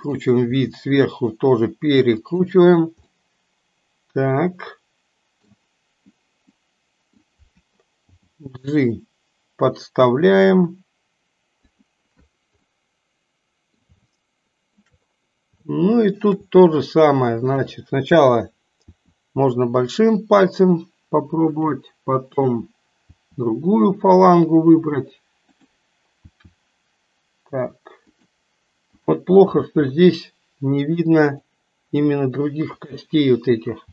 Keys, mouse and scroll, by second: 0.5 r, 3.2-5.6 middle drag, 6.6 middle click, 8.2 g, 12.8-14.0 middle drag, 14.0 shift+scroll up 1, 14.3-14.8 shift+middle drag, 15.7-16.3 shift+middle drag, 17.6 click, 18.9 r, 22.3 click, 23.2 r, 25.4 click, 26.3 r, 28.9 click, 29.7 r, 32.7 click, 33.8 r.